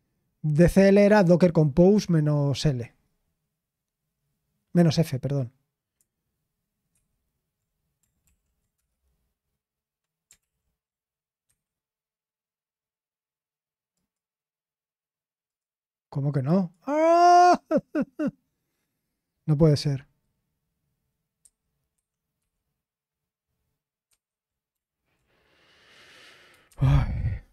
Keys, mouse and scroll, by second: 6.9 super+0, 8.2 ctrl+l, 8.7 Return, 10.4 ctrl+l, 11.4 Escape, 14.4 click, 16.5 click, 21.4 super+8, 21.9 super+7, 22.4 super+0, 24.0 super+0.